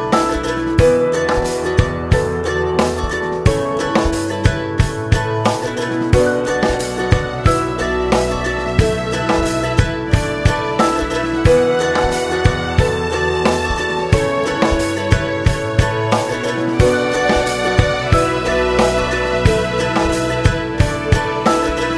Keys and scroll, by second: 11.1 ctrl+z, 17.9 [, 18.4 [, 18.5 [.